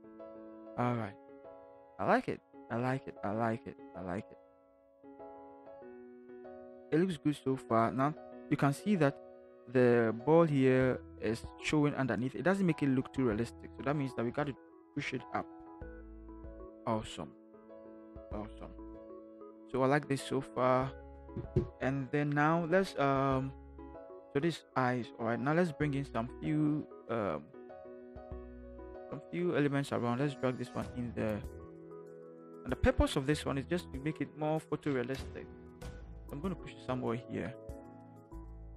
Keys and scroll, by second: 14.3 v, 14.8 Up, 15.0 Up, 15.2 Up, 15.5 Up, 15.7 Up, 15.8 Up, 16.0 Up, 16.4 Up, 35.2 shift+Return, 35.6 shift+v, 37.3 ctrl+t, 38.0 ctrl+shift+t.